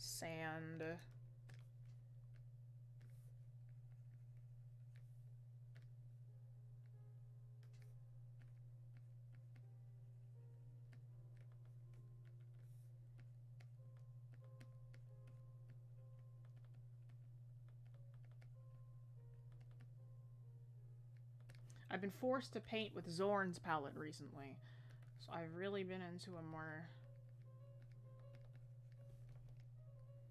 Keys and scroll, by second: 29.4 scroll down 1.